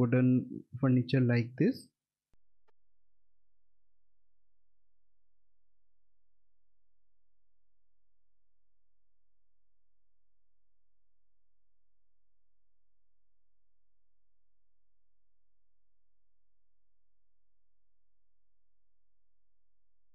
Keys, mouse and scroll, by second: 1.3 middle click, 2.0 alt+middle click.